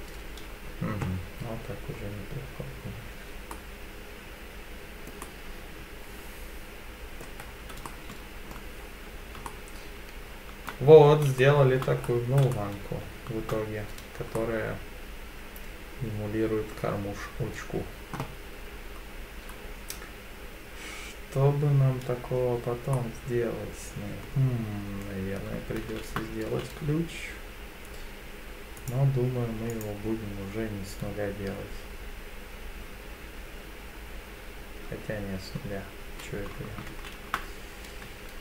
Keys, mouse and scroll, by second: 1.8 scroll down 1, 2.8-3.5 scroll down 6, 3.5-5.1 middle drag, 3.5-4.8 scroll down 1, 5.2-7.2 middle drag, 7.4-7.8 scroll down 3, 7.8-8.5 shift+middle drag, 8.7 scroll up 1, 8.8-9.4 scroll down 2, 9.4-10.7 shift+middle drag, 11.4-11.8 shift+middle drag, 12.0-12.5 scroll up 3, 12.5-13.5 shift+middle drag, 14.3-16.7 middle drag, 22.9-24.2 middle drag, 25.8 shift+a, 28.8 click, 29.7 click, 36.9 shift+a, 38.1 Tab.